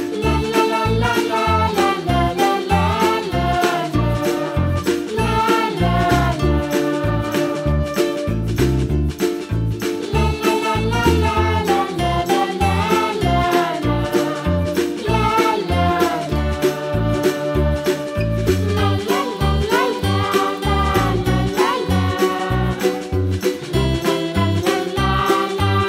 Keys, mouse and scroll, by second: 0.6 s, 1.9 s, 3.3 s, 4.2 r, 5.6 s, 7.1 g, 8.4 g, 9.3 r, 10.8 g, 12.7 scroll up 1, 12.7 middle click, 13.2 click, 13.6 g, 15.6 middle click, 16.1 click, 16.4 g, 17.4 middle click, 18.4 l, 18.8 r, 20.0 g, 21.0 scroll down 2, 21.2-22.2 middle drag, 22.2 right click, 22.9 Tab, 23.6 middle drag, 23.9 scroll up 1, 24.0 Tab, 24.6 p, 25.0 right click, 25.5 Tab.